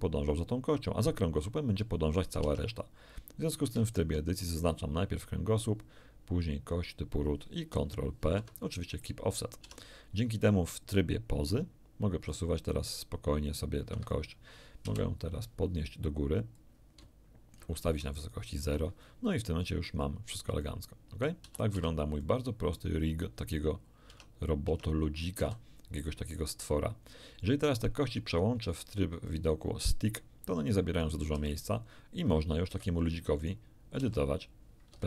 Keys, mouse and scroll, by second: 2.4 Tab, 3.8 shift+right click, 8.2 ctrl+p, 9.0 ctrl+click, 9.6 ctrl+Tab, 10.4 ctrl+click, 10.5 ctrl+right click, 12.3-14.3 drag, 13.9 Escape, 14.8 KP_1, 16.6-17.8 drag, 18.2 ctrl+shift+middle click, 20.6 middle click, 21.4 a, 21.8 a, 22.2 click, 22.6 middle click, 23.1 scroll up 2, 24.1 Tab, 24.7 Tab, 25.0-25.4 scroll down 2, 25.4 a, 29.3 click, 31.0 right click, 31.3 r, 32.7 Escape, 33.4 right click, 34.0 r, 34.9 Escape.